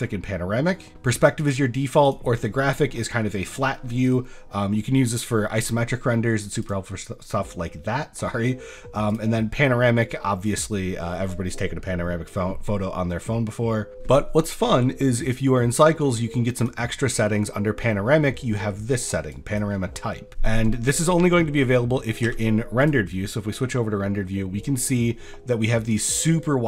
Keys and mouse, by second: 1.5-2.1 drag, 6.6-9.2 drag, 16.6 click, 22.3 z, 26.2-26.6 drag.